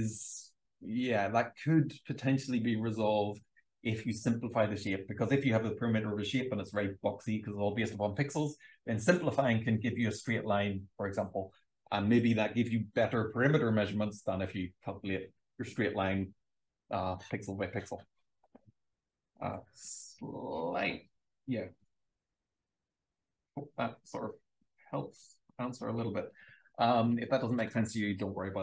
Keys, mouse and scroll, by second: 21.1 click, 21.7 click, 21.9 click, 22.5 BackSpace, 23.9 m, 24.9 click, 25.5 shift+f.